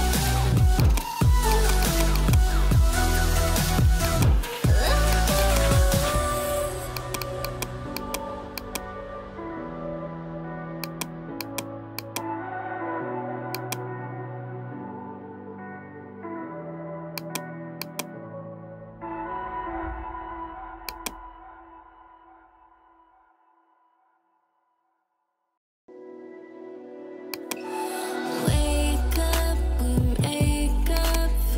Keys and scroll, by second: 2.4 ], 4.6 [, 12.6 [, 20.1 ], 28.4 ].